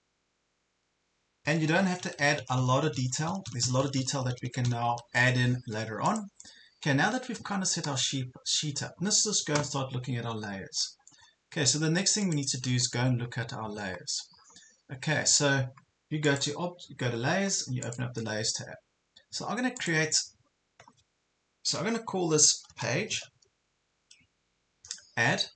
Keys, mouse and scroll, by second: 1.6 Up, 1.8 Up, 2.2 Up, 2.5 Up, 2.8 Up, 3.0 Up, 3.2-4.7 typing, 6.1-17.4 drag, 22.7 typing, 23.4 shift+Page_Down.